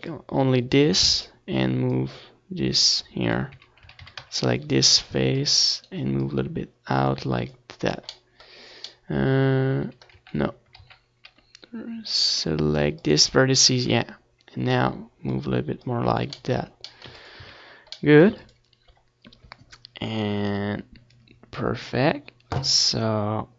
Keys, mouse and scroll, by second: 0.2-2.7 drag, 0.2-1.6 middle drag, 1.9 middle click, 1.9 right click, 2.7-4.3 middle drag, 3.8 ctrl+z, 4.3 ctrl+z, 5.3-6.9 drag, 5.7 c, 6.3 right click, 6.7 middle click, 7.4-8.9 drag, 7.4 right click, 7.6 middle click, 8.9 Tab, 9.2 ctrl+s, 9.6 z, 10.4 ctrl+s, 18.3 KP_7, 18.6 Tab, 19.0 a, 19.2-21.6 middle drag.